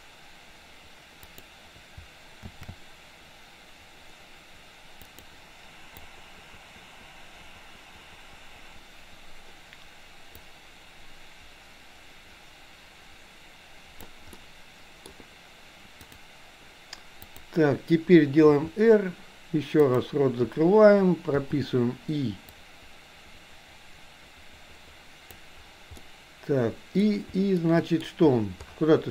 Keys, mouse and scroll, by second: 2.8 shift+d, 6.1-9.6 drag, 10.4-14.1 drag, 14.3-15.0 middle drag, 16.0 click, 17.4 click, 18.5 r, 21.4 i, 22.6-25.4 drag, 26.0-27.0 middle drag, 27.6-28.0 shift+middle drag.